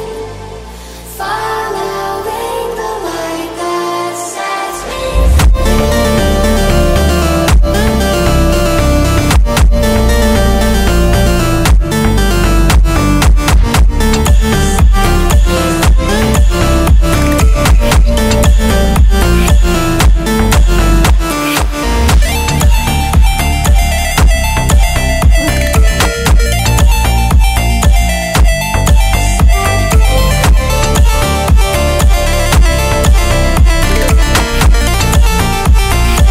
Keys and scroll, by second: 2.1 m, 2.4 o, 2.6 n, 2.9 t.